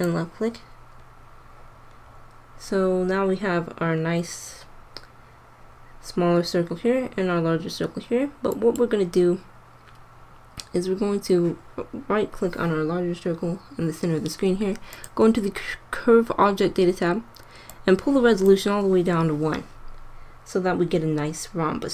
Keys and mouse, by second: 1.5 click, 8.4-10.2 drag, 10.2-14.8 middle drag, 14.8-16.4 drag.